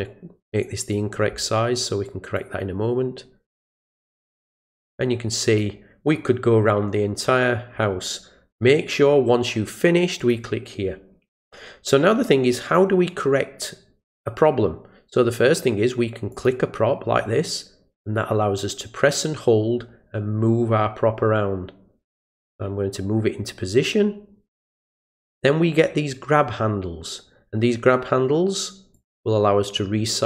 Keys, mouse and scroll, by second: 2.3-3.6 drag, 4.4-5.6 drag, 10.2 click, 16.3 click, 17.5-25.2 drag, 28.9-30.2 drag.